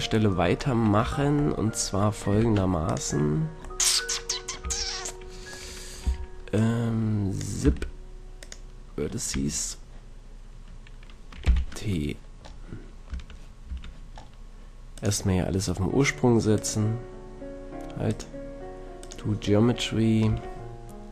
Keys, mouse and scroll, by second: 1.1 Tab, 2.4 ctrl+Tab, 4.6 a, 6.1 b, 7.5 click, 7.7 x, 9.3-11.5 drag, 9.4 a, 11.5 t, 12.5-13.1 drag, 13.1 Tab, 13.7 Tab, 14.9-16.8 drag, 18.1-20.0 drag, 20.3 Tab.